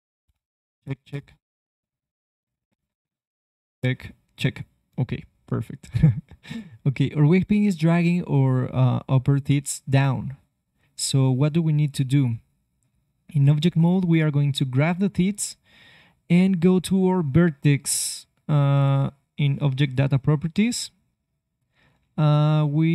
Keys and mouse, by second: 6.8-8.8 drag, 12.1-16.1 drag, 12.8 ctrl+Tab, 19.7-21.7 drag.